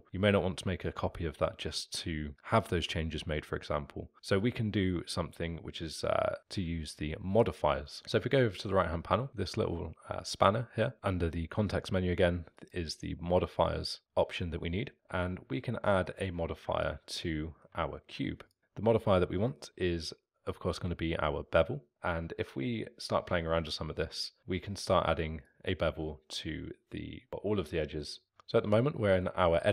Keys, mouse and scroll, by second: 12.5 click, 15.9 middle click, 16.8 alt+click, 17.3-18.4 alt+middle drag, 18.4-21.0 drag, 22.6-25.3 middle drag, 25.5-27.3 drag, 27.3-28.2 alt+middle drag, 28.2 scroll up 2, 28.3-29.7 alt+middle drag.